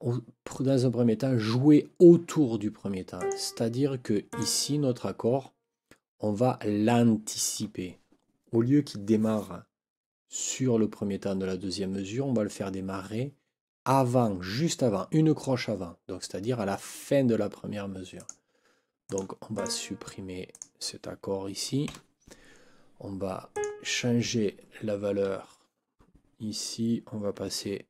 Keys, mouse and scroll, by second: 3.2 click, 4.3 click, 18.1 click, 19.0 click, 19.5 click, 20.5 click, 21.9 Delete, 23.5 click, 27.4 6.